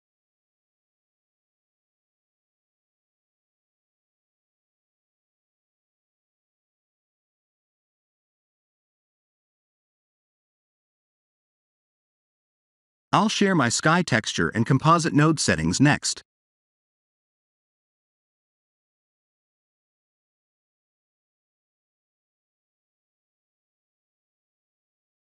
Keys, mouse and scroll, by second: 0.9 click, 6.5 click, 7.0 click, 7.8 click, 8.2 click, 8.6 click, 8.9 click, 10.8 click, 11.3 click, 11.7 click, 13.6 click.